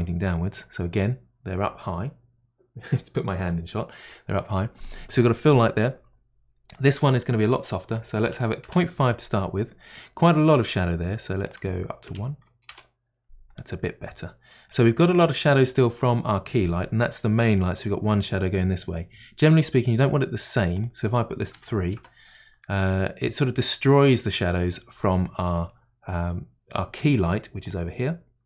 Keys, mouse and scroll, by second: 9.9-12.7 middle drag, 11.4-13.7 drag, 13.5-19.9 middle drag, 19.7 click, 20.7-22.5 drag, 22.5-23.1 middle drag, 23.1 scroll up 1, 23.4-27.6 middle drag, 27.6 click.